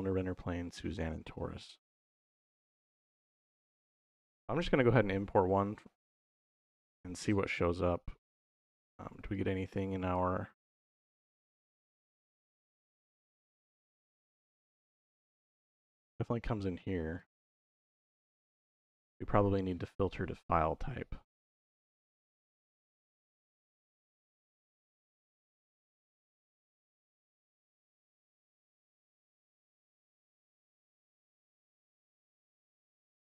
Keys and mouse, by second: 9.1 click, 11.1 click, 16.5 g, 17.0 right click, 17.8 middle click, 18.6 middle click, 20.1-21.9 drag, 27.8 middle click, 30.3-31.8 middle drag, 32.4 middle click.